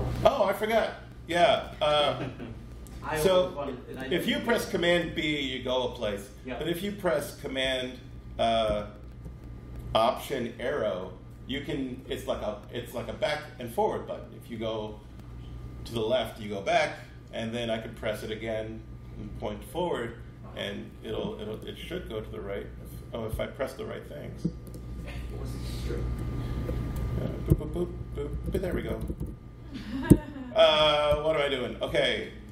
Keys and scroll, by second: 4.9 super+b, 7.5 super+Left, 8.6 alt+super+Left, 20.0 ctrl+alt+Right, 23.2 alt+super+Right, 25.8 super+b, 27.4 alt+super+Left, 27.9 alt+super+Right, 28.2 alt+super+Left, 28.4 alt+super+Right, 28.8 alt+super+Left, 28.9 alt+super+Right, 30.0 alt+super+Left, 30.7 alt+super+Right, 31.0 alt+super+Right, 31.8 alt+super+Left.